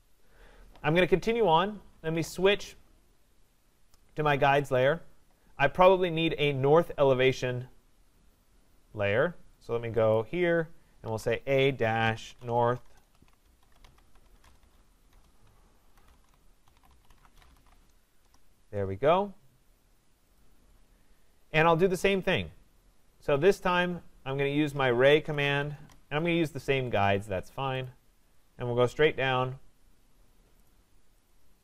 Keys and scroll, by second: 12.8 BackSpace, 18.2 Return, 25.7 Return.